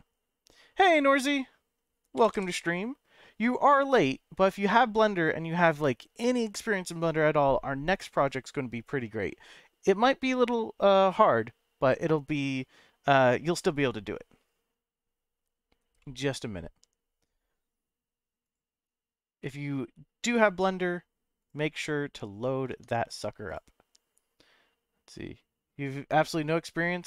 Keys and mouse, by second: 2.2 g, 2.3 g, 7.9 right click, 16.0 middle click, 18.5 click, 19.4-20.8 middle drag, 21.4 click, 22.7 Tab, 23.4 click.